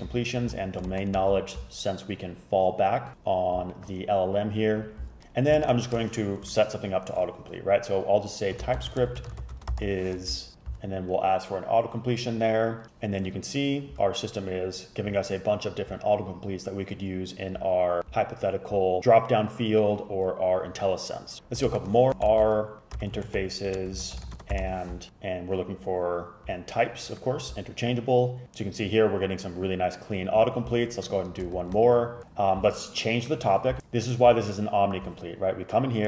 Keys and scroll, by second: 0.2 Down, 0.6 Down, 1.0 shift+super+Right, 1.2 super+v, 5.7 shift+super+Left, 6.5 BackSpace, 8.4-10.4 typing, 21.8 shift+super+Left, 22.1-25.2 typing, 31.7 shift+super+Left, 32.2 BackSpace.